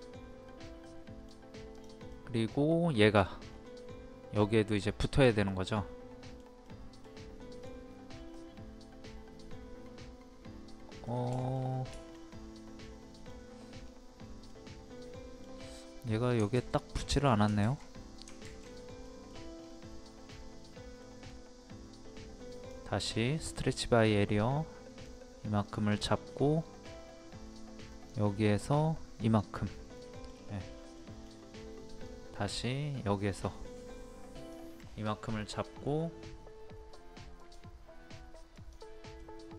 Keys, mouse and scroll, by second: 1.7 click, 2.1-3.2 middle drag, 3.5-4.4 scroll up 1, 4.4 middle click, 5.1-5.5 scroll up 1, 5.5 middle click, 7.6 scroll up 1, 8.3-13.8 middle drag, 13.8 scroll down 1, 14.5-16.3 middle drag, 19.0 middle click, 19.3-19.9 scroll down 2, 19.9-22.2 middle drag, 22.5-25.2 drag, 26.3-26.7 scroll up 1, 27.9 click, 30.0 middle click, 30.3-30.7 scroll down 1, 31.0 middle click, 32.0-35.2 drag, 35.3 middle click, 35.9 scroll up 1, 37.4 click, 39.2-39.5 middle drag.